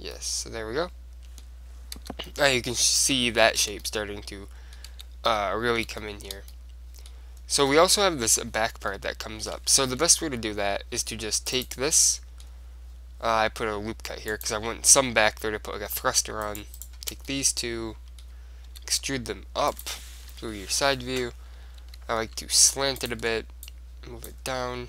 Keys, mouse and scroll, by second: 2.2 Tab, 3.7 Tab, 5.1 Tab, 6.4-11.0 middle drag, 10.0 ctrl+r, 11.8-13.6 drag, 12.6-13.8 middle drag, 14.5-16.2 drag, 16.6-17.8 right drag, 17.4 middle click, 17.9 click, 18.2 middle click, 18.8 middle click, 18.9 e, 19.3 middle click, 20.0-21.7 drag, 20.4 KP_3, 22.0 r, 23.8-24.8 drag, 24.7-24.8 middle drag.